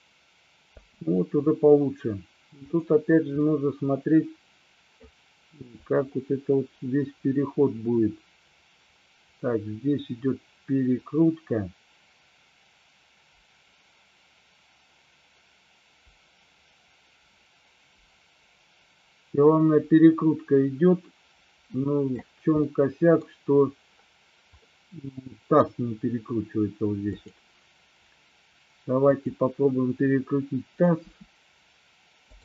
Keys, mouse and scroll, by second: 0.9 space, 2.7 click, 3.5-5.0 middle drag, 5.9-22.3 drag, 22.8-23.3 middle drag, 24.7-25.7 middle drag, 27.2 click, 29.2 click, 31.0 r.